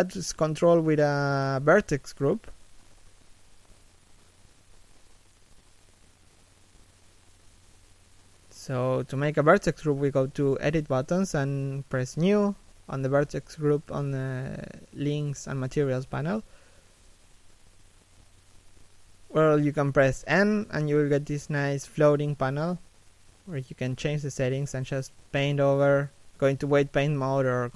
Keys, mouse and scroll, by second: 0.4 middle click, 0.9 shift+middle click, 6.4 middle click, 10.9 click, 21.6 b, 22.3 n, 23.9 middle click, 24.5-24.9 scroll up 1, 24.9 middle click, 25.2 click.